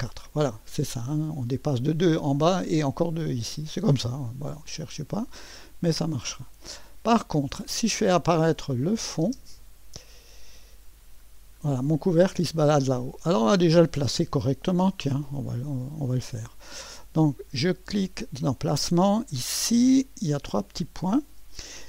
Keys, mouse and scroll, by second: 1.0-2.1 drag, 4.8-7.5 drag, 8.5 click, 9.5 space, 11.9 click, 16.4 click, 19.8 click, 20.6 click.